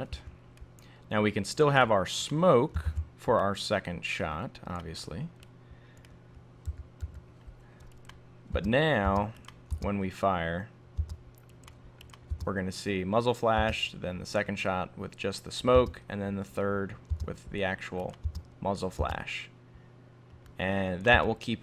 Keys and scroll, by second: 2.9 super+d.